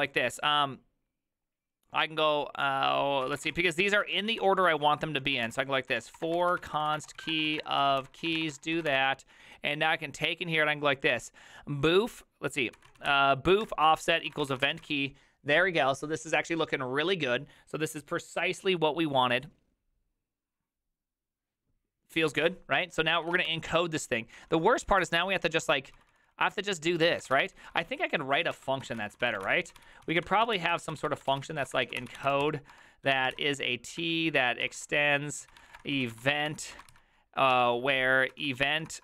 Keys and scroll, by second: 3.1-4.0 typing, 5.2-9.5 typing, 14.0-15.3 typing, 23.1-39.0 typing.